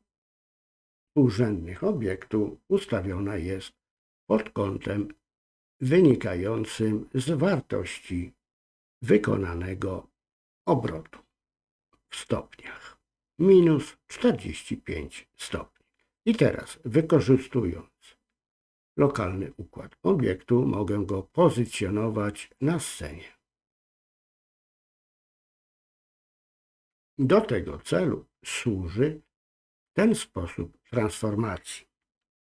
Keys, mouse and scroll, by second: 21.6 click, 23.8 click, 25.9 ctrl+z.